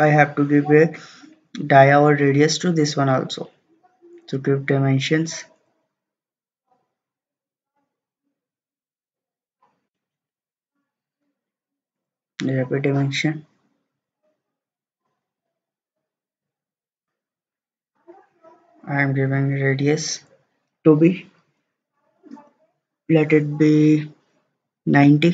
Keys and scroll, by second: 10.3 Escape, 25.2-25.3 typing.